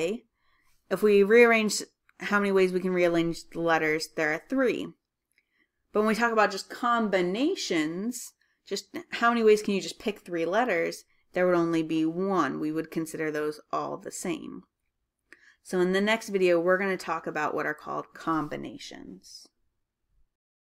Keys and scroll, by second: 3.7-4.5 typing.